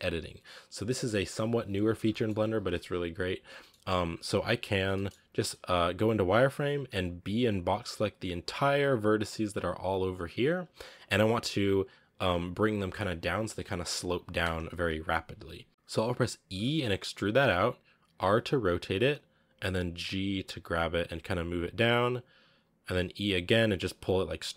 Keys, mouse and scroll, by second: 0.7 scroll down 1, 0.7 middle click, 1.6 a, 1.8 a, 1.9 middle click, 2.3 a, 2.4-2.9 scroll up 3, 3.4 scroll down 1, 3.5 middle click, 4.0-4.7 scroll up 1, 4.7 scroll down 1, 4.8 middle click, 5.6 z, 6.2 a, 6.3 a, 8.2 b, 9.5 z, 14.3 KP_1, 15.2 scroll up 4, 16.4 e, 18.0 r, 20.1 g, 22.7-24.5 typing.